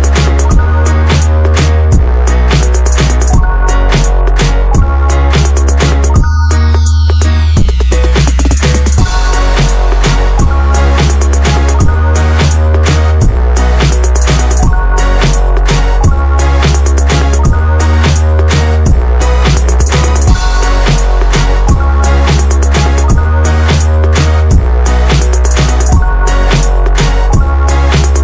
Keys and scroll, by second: 1.5 space, 2.6 Escape, 2.9 Escape, 3.0 Escape, 4.4 Escape, 4.5 Escape, 4.6 Escape, 5.4-6.2 typing, 8.2-8.5 Escape, 9.1 Escape, 9.1 typing, 10.3 space, 10.9 space, 11.4 Escape, 11.4 space, 13.1 Escape, 13.1 b, 13.4 space, 17.2 BackSpace, 17.6 4, 18.0 ctrl+a, 18.3 ctrl+c, 19.4 space, 21.9 b, 22.0 space, 22.6 ctrl+v, 23.0 BackSpace, 23.2 5, 25.3 space, 27.6 Escape, 28.1-28.2 typing.